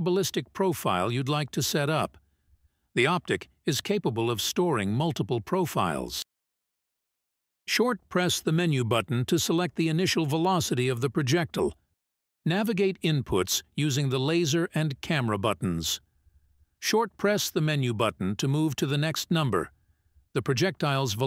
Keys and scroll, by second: 12.4 Menu, 15.6 Menu, 18.1 Menu, 20.9 Menu.